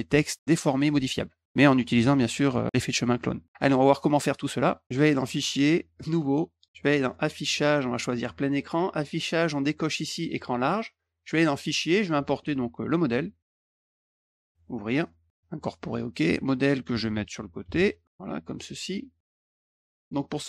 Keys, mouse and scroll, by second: 4.0 middle click, 4.8 click, 6.0 click, 7.0 click, 8.0 click, 8.7 click, 11.9 click, 14.5 click, 15.4 click, 18.0 click, 19.4 ctrl+shift+click, 19.6 click.